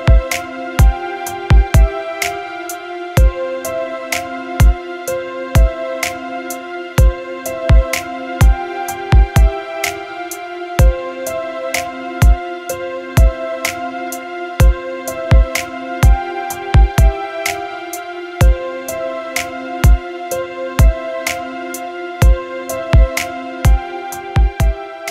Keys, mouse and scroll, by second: 5.3 KP_Subtract, 5.6 KP_Subtract, 5.9 KP_Subtract, 6.0 KP_Subtract, 6.5 KP_Subtract, 6.7 KP_Subtract, 11.9-15.5 drag, 15.5 space.